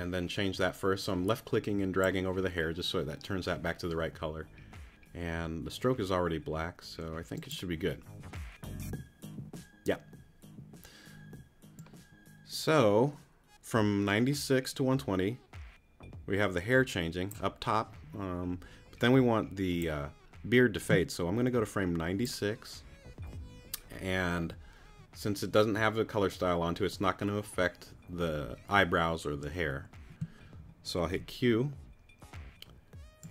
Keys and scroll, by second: 31.1 q.